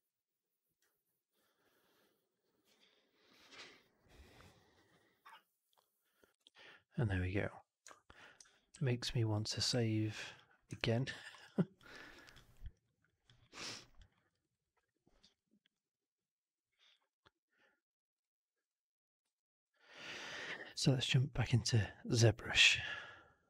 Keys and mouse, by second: 7.8 alt+drag, 8.6 ctrl+s, 9.6 ctrl+s, 10.7 alt+right drag, 10.9 alt+click, 11.1 alt+middle click, 11.2 alt+right click, 11.7 drag, 12.0 right click, 12.2 drag, 12.6 alt+right click, 12.9 alt+drag, 13.3 alt+middle click, 13.5 alt+right drag, 13.7 alt+drag, 14.0 alt+middle click, 14.2 alt+right click, 14.4 alt+right click, 18.5 click, 19.2 alt+drag, 19.6 alt+right drag, 19.8 alt+click.